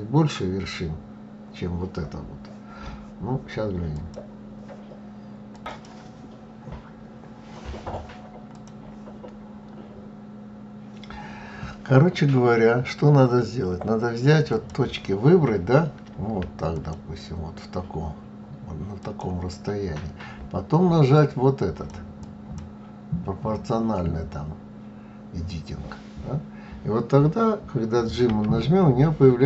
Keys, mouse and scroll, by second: 5.2 click, 13.9 click, 16.1 shift+click, 18.3 shift+click, 20.5 click, 21.5 click.